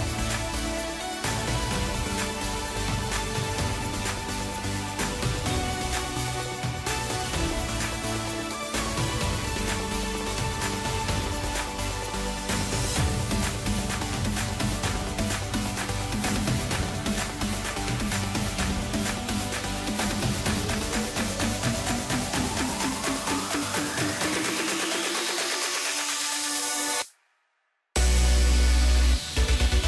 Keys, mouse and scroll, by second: 0.3 scroll down 3, 0.9 Tab, 1.4-2.0 scroll down 8, 2.0-2.6 middle drag, 2.6-4.0 scroll up 2, 4.2-6.9 drag, 6.9-7.9 scroll down 10, 8.1-8.9 middle drag, 8.9-9.3 scroll up 2, 9.3-10.4 middle drag, 10.4-12.7 drag, 12.7-16.4 middle drag, 16.4 shift+b, 18.4 scroll down 3, 18.6-20.1 middle drag, 20.1-22.3 drag, 22.3-22.6 scroll down 4, 22.6-23.3 middle drag, 23.3 scroll down 2, 23.6-26.5 middle drag, 26.5-27.4 scroll down 5, 27.4 KP_1, 28.0 ctrl+KP_2, 28.5 ctrl+KP_2, 28.6 ctrl+KP_2, 29.6 scroll up 2.